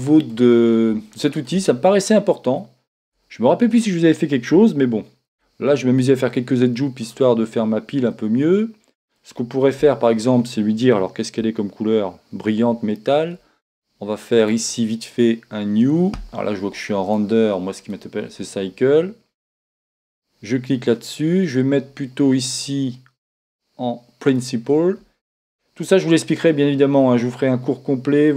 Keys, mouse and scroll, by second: 3.1 Tab, 5.3 ctrl+r, 7.6-9.3 drag, 8.1 middle click, 8.8-10.0 middle drag, 9.9 Tab, 15.2-16.9 drag, 17.9 click, 19.9-23.3 drag, 26.4-28.2 drag.